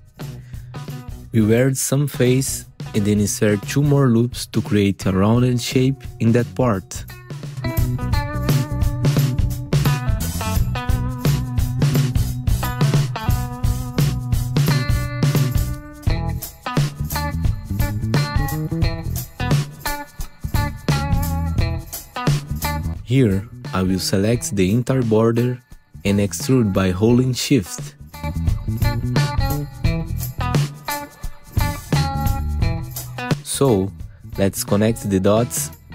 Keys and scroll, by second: 2.1 Delete, 2.7 2, 3.3 ctrl+r, 6.4 1, 6.7 F3, 9.2 ctrl+alt+e, 9.6 F3, 11.7 r, 23.6-25.8 typing, 27.0 ctrl+z, 27.8 ctrl+alt+e, 34.7 1, 35.4 F3.